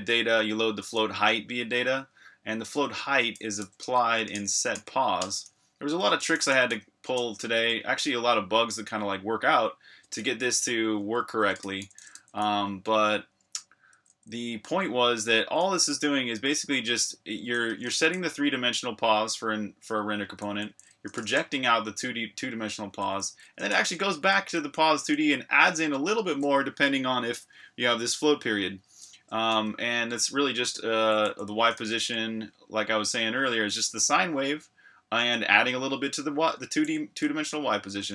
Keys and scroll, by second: 3.4-7.7 typing, 9.9-17.9 typing, 19.8 Escape, 20.0-21.6 typing, 22.6 Escape, 22.8-25.4 typing, 29.3-32.2 typing, 36.8 j, 37.9 Escape.